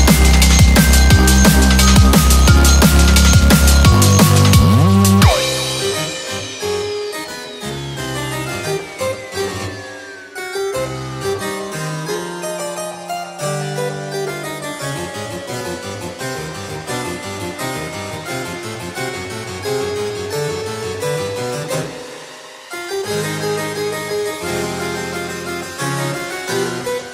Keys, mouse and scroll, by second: 0.4 click, 0.4 scroll down 11, 1.2 click, 1.5 Delete, 1.9-2.3 scroll down 2, 2.3 scroll up 1, 2.5 middle click, 4.0 click, 4.4 scroll down 1, 4.7 middle click, 5.5 shift+a, 25.2 2, 25.3 3.